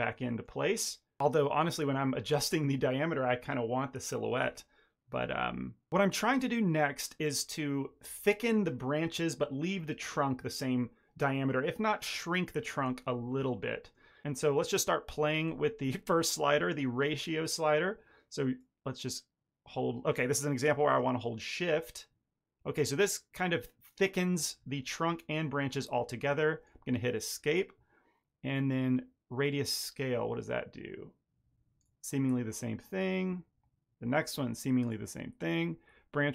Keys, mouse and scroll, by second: 0.0 ctrl+middle click, 1.6 ctrl+middle click, 1.8 shift+middle click, 13.2 middle click, 13.4 shift+middle click, 13.7 ctrl+middle click, 18.5 click, 29.4 click.